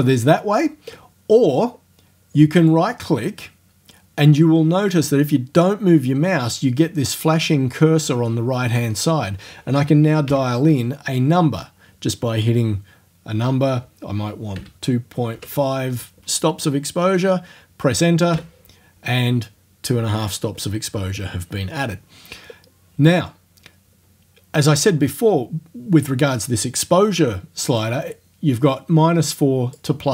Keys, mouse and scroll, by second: 2.6 right click, 10.3 KP_2, 14.6 KP_Decimal, 15.4 KP_5, 18.4 KP_Enter, 27.8-30.0 drag.